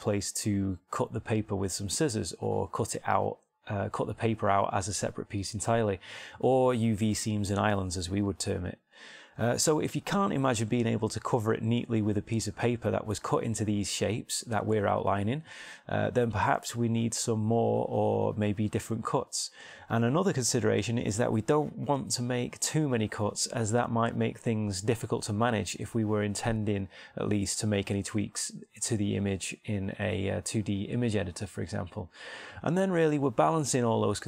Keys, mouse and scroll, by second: 8.5-9.6 middle drag, 9.7 middle click, 16.8-18.0 middle drag, 23.0-24.7 middle drag, 28.6 middle click.